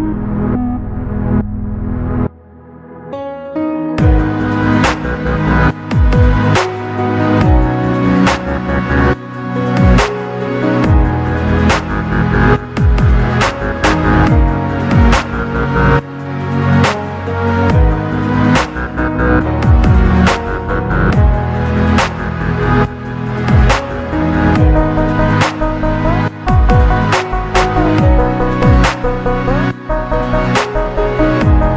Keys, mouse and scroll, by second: 1.2 click, 2.8 Tab, 3.4 click, 5.2 KP_3, 5.8-6.2 scroll up 2, 6.2 shift+middle click, 7.2-8.2 scroll up 1, 8.9 click, 10.1-12.9 drag, 16.8 ctrl+KP_Add, 17.2 ctrl+KP_Add, 17.6 ctrl+KP_Add, 20.1 s, 20.4 z, 24.9 click, 25.7-26.7 drag, 27.5 Tab, 28.0-28.6 scroll down 2, 28.3-30.9 middle drag.